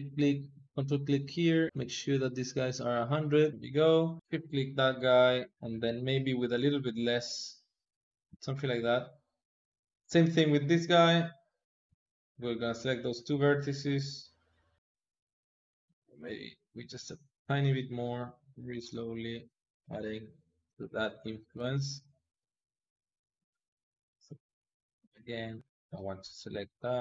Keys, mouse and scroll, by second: 0.5 ctrl+click, 1.4-3.5 drag, 4.2 shift+click, 6.4-8.4 drag, 8.9-10.5 drag, 12.0 shift+click, 12.8 shift+click, 13.5-21.2 drag, 21.2 ctrl+z, 21.7 ctrl+click, 22.5 ctrl+click, 23.5 ctrl+click, 24.5 shift+click, 25.7-27.0 drag.